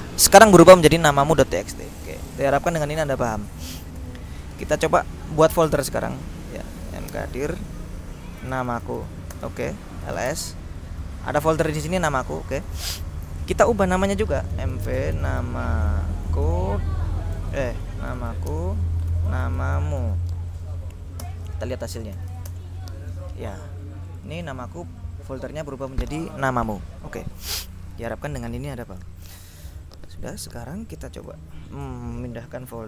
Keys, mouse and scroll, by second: 0.8 click, 2.0 click, 3.0 click, 4.1 ctrl+l, 5.5-7.2 typing, 8.3-10.8 typing, 11.7 click, 12.6 click, 14.3-20.6 typing, 21.3 Return, 22.0-22.9 typing, 24.2 click, 26.5 click, 29.3 ctrl+l.